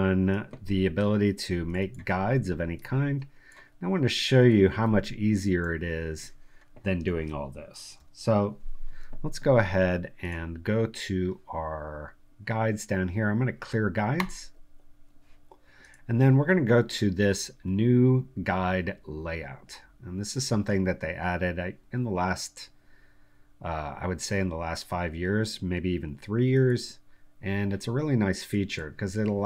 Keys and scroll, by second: 7.9 Delete.